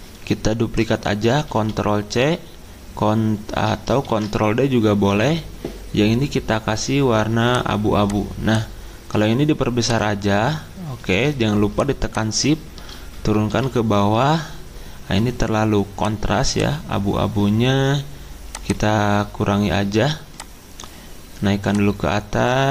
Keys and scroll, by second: 1.5 c, 4.1 ctrl+d, 13.1 ctrl+Page_Down, 13.5 ctrl+Page_Down.